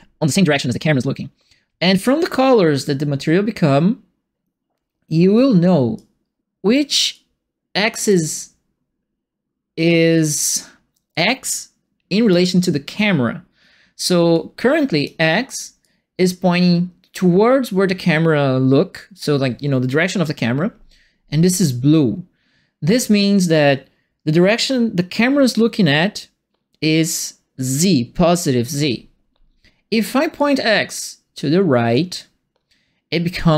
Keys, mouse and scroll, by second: 5.9 click, 7.1 click, 11.1-12.3 drag, 14.3 click, 15.8-19.2 drag, 30.3-33.5 drag.